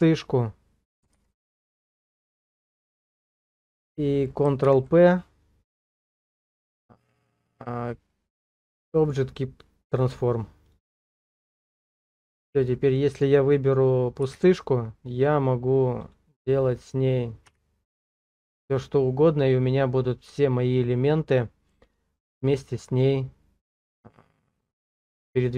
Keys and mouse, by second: 1.1 alt+p, 4.6 ctrl+p, 14.3 g, 16.0 right click, 17.5 r, 18.8 right click, 24.9-25.5 middle drag.